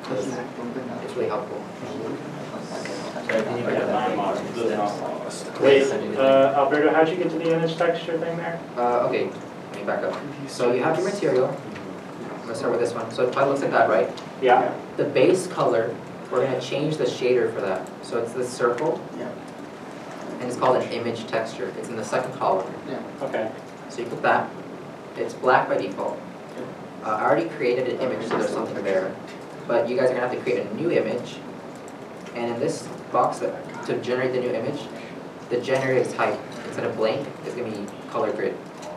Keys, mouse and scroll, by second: 6.6 alt+a, 8.4 alt+a.